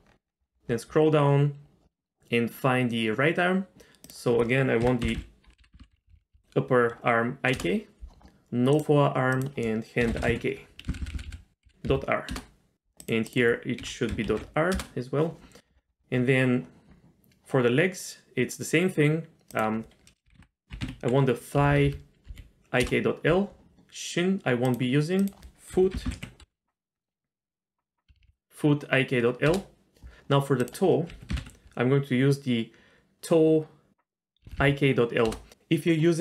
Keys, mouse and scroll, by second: 0.0-1.7 scroll down 7, 4.1-7.6 drag, 5.8 p, 6.1 Down, 8.7 click, 9.3-12.3 drag, 11.0 Down, 11.1 Down, 13.0-14.7 drag, 15.6-18.9 scroll down 6, 19.5-22.8 drag, 21.7 Down, 21.8 Down, 24.6 click, 25.2-29.5 drag, 26.0 o, 28.1 Down, 28.2 Down, 30.6-35.3 drag, 34.4 Down, 34.6 Down.